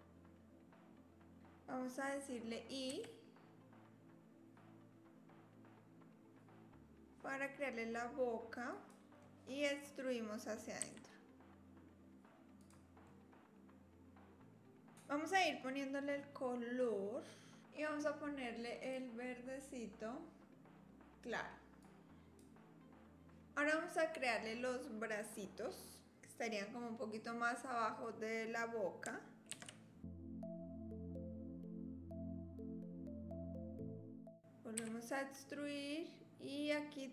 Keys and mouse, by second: 9.2 click, 10.8 e, 12.6 e, 13.1-14.9 drag, 18.9-22.5 drag, 29.5 ctrl+r, 31.1 ctrl+r, 31.6 click, 32.4 3, 32.5 click, 32.7 shift+click, 33.1 middle click, 33.8 e, 34.8 e.